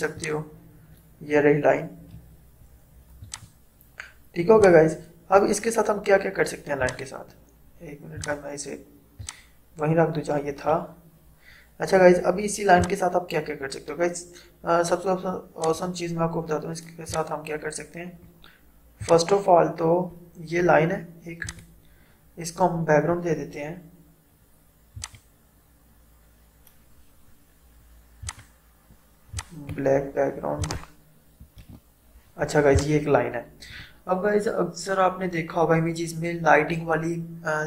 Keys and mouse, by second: 12.8-21.5 drag, 25.0 click, 28.3 click, 31.7 ctrl+BackSpace, 32.7-36.3 drag.